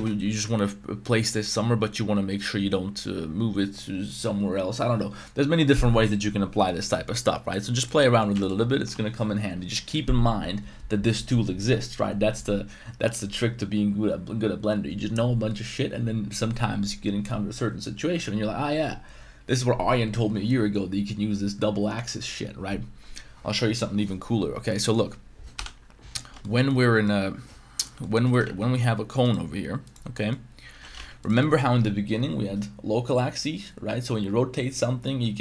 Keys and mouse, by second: 8.0 middle drag, 8.3 x, 24.8 middle click, 25.5 KP_7, 26.4 shift+middle drag, 27.0-27.8 middle drag, 28.0-28.4 middle drag, 28.4 shift+a, 30.1 middle drag, 30.7 g, 30.9 z, 31.4 shift+middle drag.